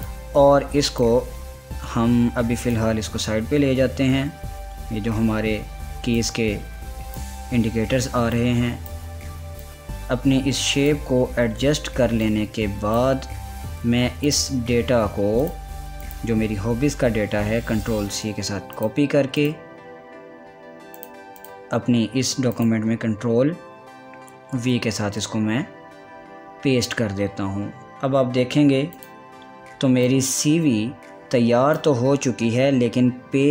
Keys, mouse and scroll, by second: 6.8 click, 6.9-14.9 drag, 17.4 ctrl+a, 18.5 ctrl+c, 19.4 click, 23.6 ctrl+a, 25.2 ctrl+v, 28.6 ctrl+v, 28.8 scroll down 1, 29.6-33.3 drag, 33.3 scroll up 1.